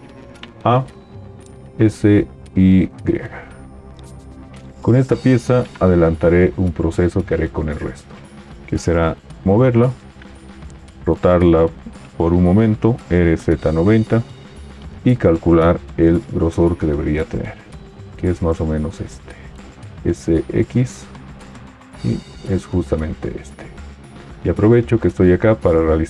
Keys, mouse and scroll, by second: 0.6 a, 1.6 s, 1.6 y, 9.5 g, 12.9 typing, 19.9 s, 19.9 x.